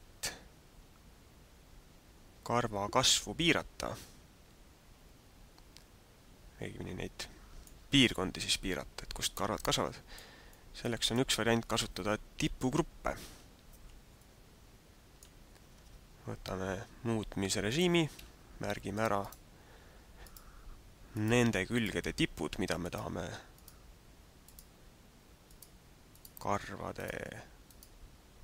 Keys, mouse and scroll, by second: 8.0 middle click, 10.4 middle click, 14.2 middle click, 15.8 Tab, 17.7 right click, 19.1 shift+right click, 20.2 shift+right click, 21.2 shift+right click, 21.8 shift+right click, 23.0 shift+right click, 23.6 shift+right click, 24.7 shift+right click, 25.5 shift+right click, 26.2 shift+right click, 27.1 shift+right click, 27.9 shift+right click.